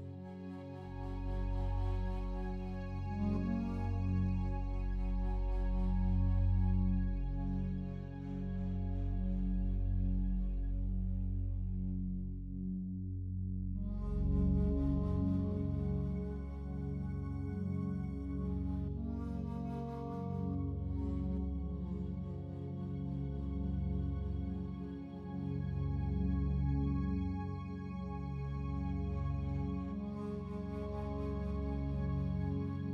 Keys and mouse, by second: 0.2 alt+click, 1.1 alt+click, 1.9-3.6 alt+drag, 3.8-4.8 ctrl+alt+drag, 5.2 click, 7.1 typing, 7.7 click, 8.9 alt+click, 9.5 ctrl+alt+click, 10.0 alt+click, 11.0 alt+shift+click, 11.5 alt+click, 12.0 alt+click, 13.2 click, 13.6 click, 14.6-16.9 drag, 17.5 ctrl+s, 18.5 click, 18.8 click, 21.5 click, 22.4-24.5 alt+drag, 28.3 click, 29.4-32.2 alt+drag, 32.4 ctrl+alt+drag, 32.8 ctrl+alt+click.